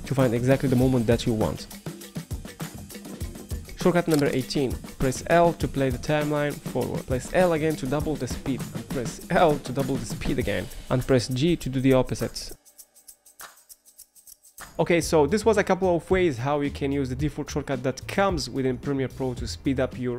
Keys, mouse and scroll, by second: 4.9 l, 10.7 j.